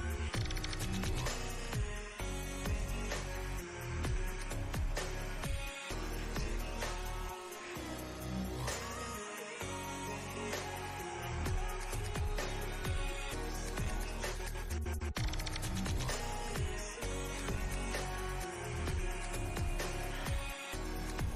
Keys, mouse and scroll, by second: 0.5-2.1 drag, 2.1 right click, 2.7-4.9 drag, 8.8-11.6 drag, 12.9 ctrl+t, 13.9-14.6 alt+drag, 15.9-16.6 alt+drag, 18.9 space, 19.0-19.7 click, 19.2 space, 20.2-20.8 click, 21.2-21.3 drag.